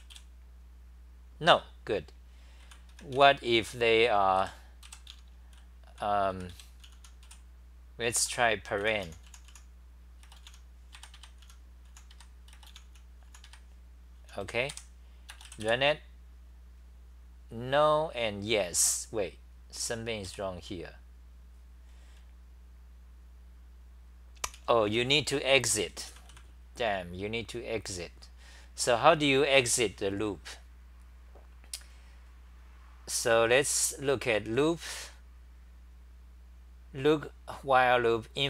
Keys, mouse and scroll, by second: 2.4-15.2 typing, 20.3 3, 24.5-25.0 t.